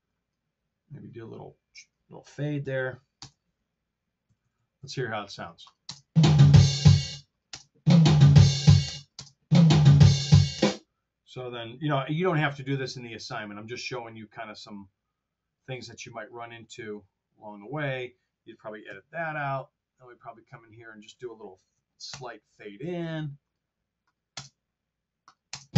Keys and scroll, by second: 2.5 super+f, 3.1 Return, 4.2 r, 5.8 space, 7.0 space, 8.9 space, 10.5 space, 12.1 t, 13.5 r, 18.8 BackSpace, 22.0 super+f, 24.4 space, 25.6 space.